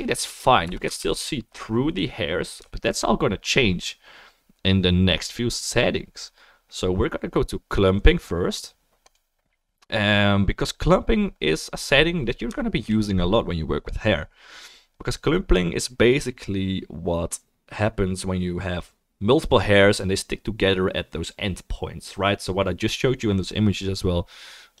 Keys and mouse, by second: 0.6 KP_0, 1.5 ctrl+s, 1.5 click, 1.6-7.8 middle drag, 7.8-12.5 drag, 23.8-24.8 drag.